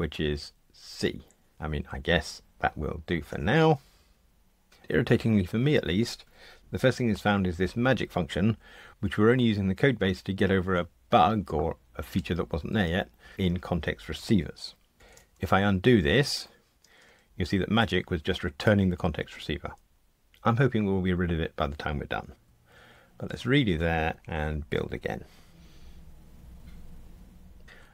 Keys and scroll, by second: 15.7 super+z, 22.7 shift+super+z, 25.5 super+F9.